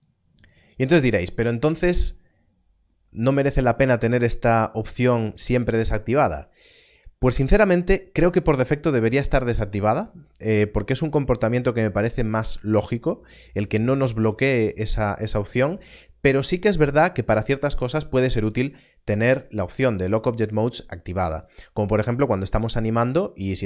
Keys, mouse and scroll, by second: 3.5 click, 19.2 click.